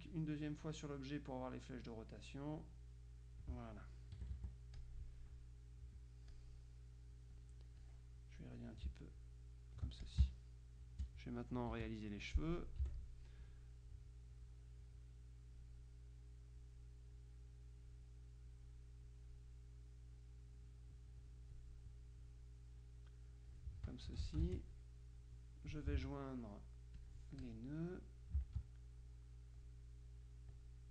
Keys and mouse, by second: 1.9 click, 3.9 click, 4.2 KP_Subtract, 4.8 click, 6.4 click, 8.0-9.0 drag, 9.3-10.7 ctrl+drag, 10.3 ctrl+space, 11.8 KP_Subtract, 13.0 F6, 14.4-16.2 drag, 16.7 click, 17.6 click, 20.3-22.1 drag, 22.9-24.2 drag, 24.2 F2, 24.6 shift+click, 26.0 ctrl+a, 27.0-28.0 drag, 28.4-30.1 ctrl+drag.